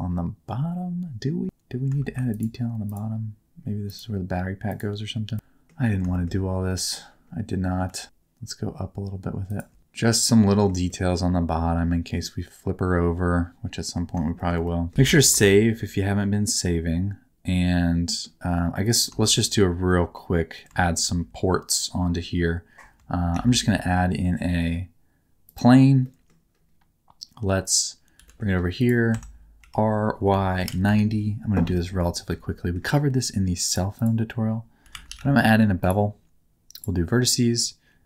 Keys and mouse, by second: 3.9 ctrl+click, 5.3 middle click, 6.1 shift+middle click, 6.7 middle click, 7.9 e, 9.5 shift+click, 9.8 alt+z, 9.8 Tab, 9.8 middle click, 10.9-13.9 middle drag, 14.3 shift+middle click, 14.7 middle click, 15.3 ctrl+shift+s, 15.5 shift+middle click, 16.4-18.2 middle drag, 19.2 shift+middle click, 19.8 middle click, 20.8 shift+middle click, 23.3 shift+a, 26.0 middle click, 28.1 g, 29.1 Tab, 29.6 r, 30.2 y, 30.6 KP_9, 30.6 KP_0, 30.8 KP_Enter, 31.7 shift+middle click, 32.0 middle click, 32.5 middle click, 33.7 click, 34.1-35.9 drag.